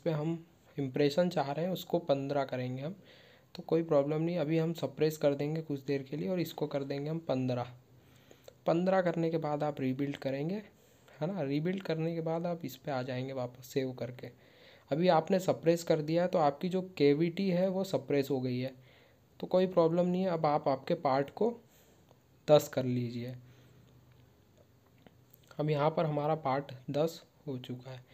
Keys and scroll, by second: 9.0 ctrl+q.